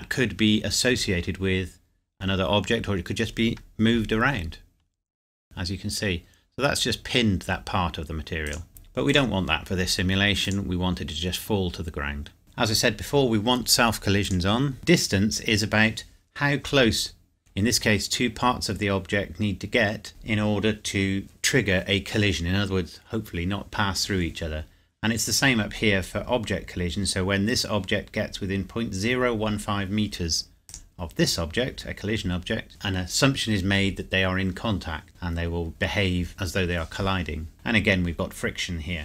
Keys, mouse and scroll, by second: 5.4 Tab, 8.5 click, 12.4-13.4 scroll down 1, 14.2 click, 14.7 scroll down 1, 30.7 click, 35.4-36.9 scroll down 1, 37.5-38.1 scroll down 1.